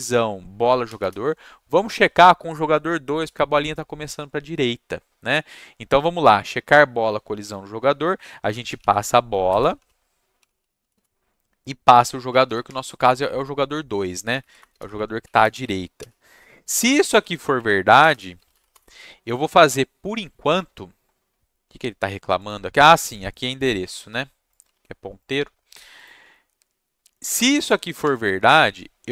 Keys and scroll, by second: 0.8 shift+9, 8.4-13.4 typing, 14.2 Down, 14.4 Down, 14.6 Return, 15.2 Left, 16.0 /, 17.1 Right, 17.5 Left, 18.0 BackSpace, 18.1 BackSpace, 18.3 space, 18.5 shift+], 18.7 Return, 23.5-25.3 typing, 28.0 Tab, 28.1 =.